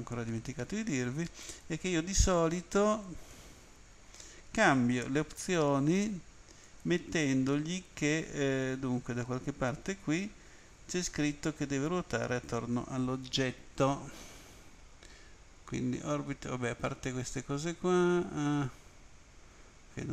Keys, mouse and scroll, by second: 1.4 click, 3.3 click, 6.6 click, 10.9-11.7 scroll down 2, 11.9 scroll up 2, 15.8-16.3 scroll down 1, 16.7-17.0 scroll down 1, 17.3-17.6 scroll down 1, 18.0-18.5 scroll down 1, 18.7-19.6 scroll down 3.